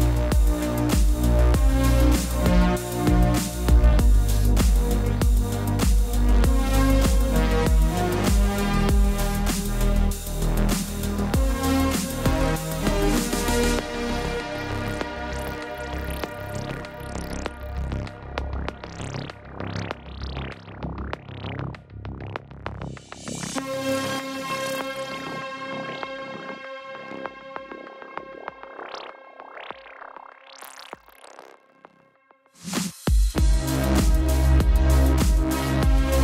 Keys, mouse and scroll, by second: 0.6 click, 4.5 click, 6.3 click, 7.1 click, 9.2 click, 10.1 ctrl+0, 10.7-11.4 typing, 12.1 right click, 13.9 click, 15.7 space, 15.8 click, 15.8 space, 16.1 click, 17.4 ctrl+t, 17.7 click, 18.6 ctrl+-, 19.1 click, 22.9 Return, 24.1 right click, 25.8 click, 28.7 ctrl+t, 29.0 typing, 29.1 Escape, 29.3 click, 29.6 ctrl+t, 29.9 click, 33.4 Return, 33.9 ctrl+=, 35.1 click.